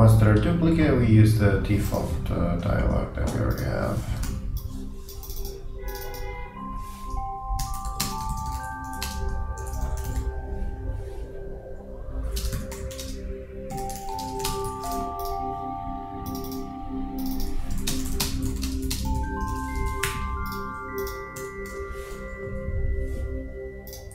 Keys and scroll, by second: 4.3 super+d, 7.7-9.7 typing, 12.4-13.3 typing, 14.7-15.5 typing, 19.3-20.1 typing, 21.8 shift+Delete, 22.5 shift+..